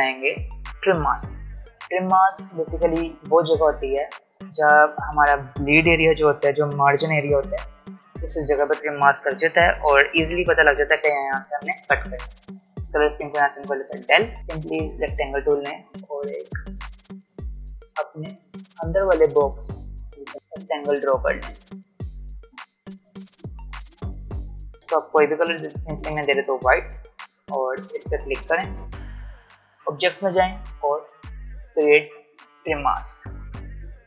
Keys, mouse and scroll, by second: 12.6-14.4 drag, 15.1-25.9 drag, 26.6 alt+scroll down 1, 27.7-29.7 drag.